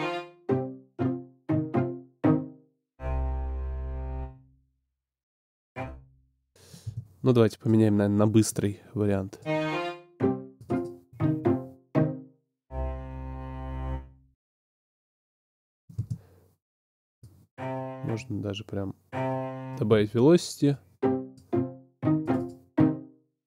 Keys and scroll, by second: 5.2 space, 14.3 space.